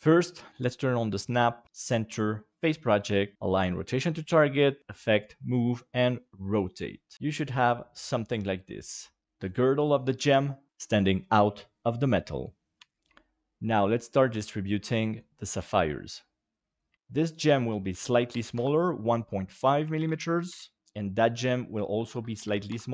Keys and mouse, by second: 0.5 click, 1.4-6.1 drag, 7.1-9.2 middle drag, 12.8 KP_7, 14.3 shift+d, 16.9 ctrl+z, 17.8 click, 19.7 ctrl+click, 20.3 ctrl+click, 20.8 ctrl+z, 21.7 click.